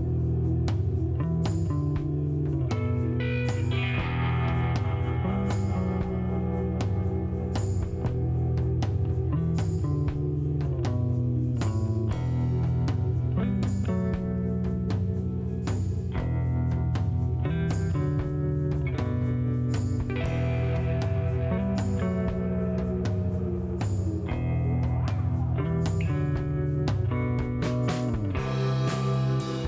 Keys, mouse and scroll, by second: 0.9 click, 3.8 scroll down 1, 4.0 middle click, 4.6 scroll up 1, 5.0 middle click, 7.5 click, 8.1 space, 9.5 shift+right click, 12.4 click, 14.0 space, 14.8 click, 15.2 middle click, 17.5 shift+right click, 19.2 click, 19.7 click, 23.0 click, 23.9 middle click, 24.3 scroll up 1, 24.8 scroll down 1, 25.1 middle click, 26.5 click, 27.8 click, 28.7 click, 29.0 right click.